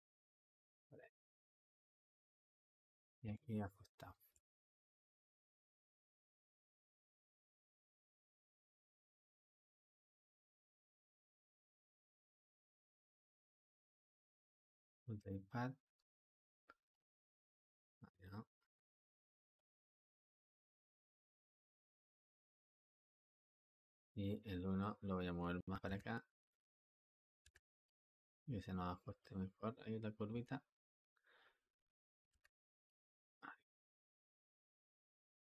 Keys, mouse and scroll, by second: 6.5-9.9 drag, 11.0 ctrl+z, 11.4 click, 12.1 click, 14.6-19.4 drag, 19.4 space, 21.8 space, 22.4 space, 23.3 space, 24.5-25.7 drag, 25.7 g, 27.3 g, 28.3 g, 30.1 g, 32.3 g, 33.9-35.5 drag.